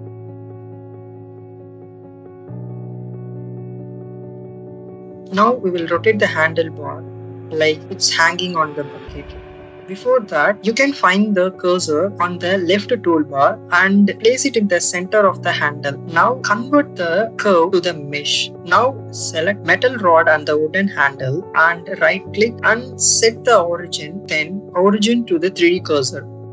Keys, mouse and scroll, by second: 0.1 click, 0.8 ctrl+r, 2.1 click, 2.9 click, 3.6 click, 4.8 click, 5.3 Tab, 6.1 click, 7.6 click, 8.7 shift+middle click, 9.7 ctrl+z, 10.1 click, 11.8 click, 14.7 click, 19.1 click, 19.5 click.